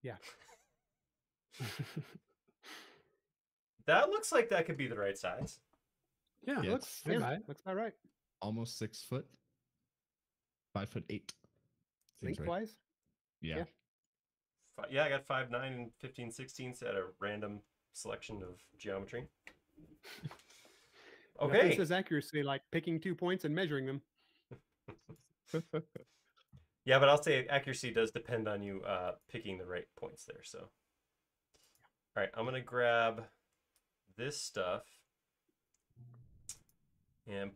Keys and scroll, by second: 0.2 e, 0.6 space, 11.0 l, 16.8 shift+space, 17.5 e, 22.9 space, 29.1 m, 32.1 space.